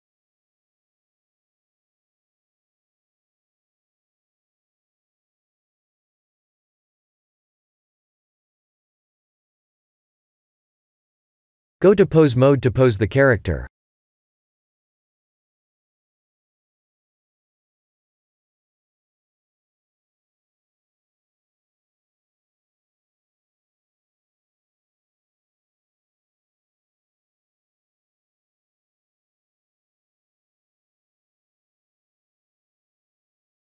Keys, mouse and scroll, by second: 1.3 click, 2.2 click, 3.0 shift+z, 3.7 shift+z, 5.0 click, 5.4 click, 8.4 ctrl+s, 9.6 click, 11.6 click, 17.7 KP_7, 18.8 r, 22.2 click, 22.6 middle click, 24.6 click, 25.1 KP_3, 26.3 r, 30.4 ctrl+z, 31.3 click, 33.3 KP_1.